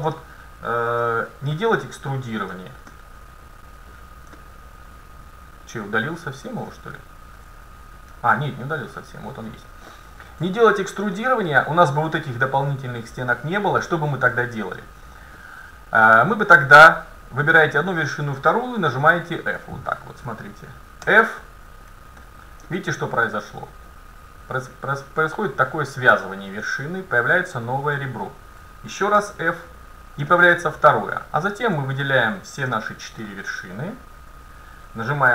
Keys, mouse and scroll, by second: 1.1-2.9 drag, 1.9-3.1 middle drag, 3.7 scroll up 1, 4.0-4.4 scroll down 1, 4.6-6.3 middle drag, 8.4 middle click, 11.0-13.4 middle drag, 14.7 scroll up 1, 14.8-17.4 middle drag, 19.2-21.8 right drag, 21.2 f, 22.3 middle click, 22.7-24.5 middle drag, 27.5-30.1 right drag, 29.2 f, 30.4-31.4 middle drag, 32.3 right click, 33.0-34.6 middle drag, 33.0 right click, 34.1-35.3 right drag.